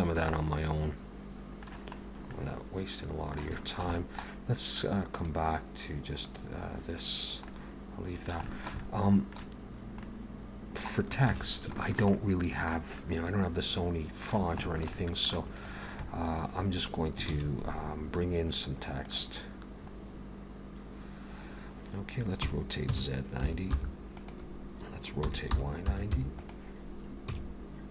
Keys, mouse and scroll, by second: 0.4 middle click, 2.0 scroll down 2, 2.3 middle click, 3.6 shift+middle click, 4.0 middle click, 5.2 click, 7.5 middle click, 8.5 shift+middle click, 8.8 middle click, 10.1 middle click, 10.2 shift+middle click, 11.3 ctrl+s, 11.8 shift+middle click, 12.0 shift+middle click, 12.2 middle click, 13.0 middle click, 13.2 shift+middle click, 14.7 shift+middle click, 14.9 middle click, 15.6 click, 17.3 shift+a, 20.0 scroll down 1, 22.4 r, 25.3 r, 27.3 s.